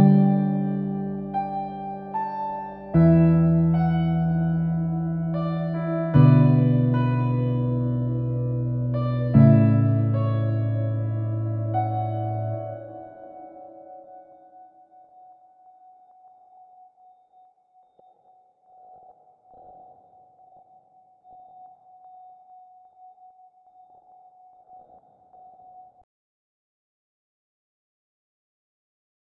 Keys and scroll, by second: 0.0-0.2 typing, 0.2 Return, 9.7 typing, 10.1 Return.